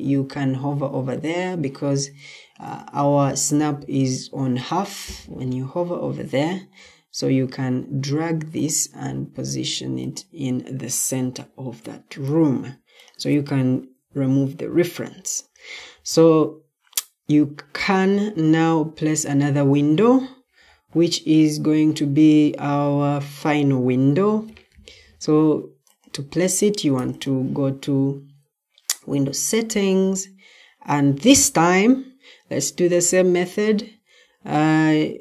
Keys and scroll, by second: 6.7 ctrl+d, 10.6 Escape, 13.9 Delete.